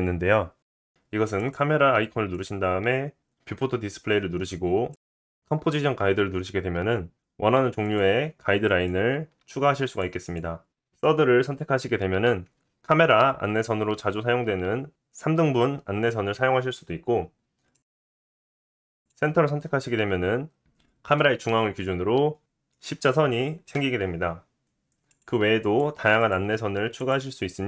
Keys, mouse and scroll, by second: 1.0 click, 1.1-2.0 middle drag, 2.0-8.3 drag, 8.3-10.6 middle drag, 10.6 click, 10.7-17.7 middle drag, 17.7 click, 17.8-19.2 middle drag, 19.2 click, 19.3-22.3 middle drag, 25.1 click, 25.6 click, 26.2 click, 27.0 click, 27.5 click.